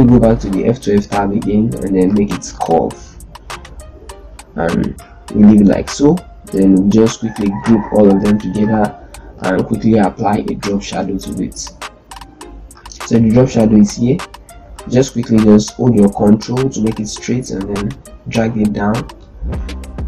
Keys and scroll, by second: 7.4 ctrl+g, 8.6 shift+c.